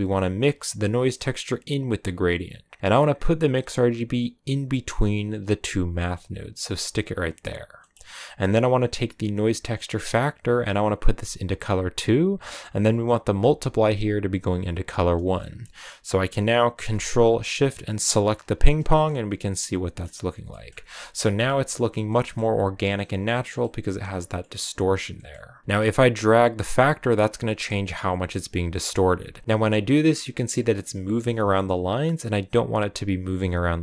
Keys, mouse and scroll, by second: 6.9-11.8 drag, 13.2-18.4 drag, 18.9-20.5 middle drag, 20.5 scroll up 2, 21.3 scroll up 1, 21.3-25.9 middle drag, 25.9-31.2 drag.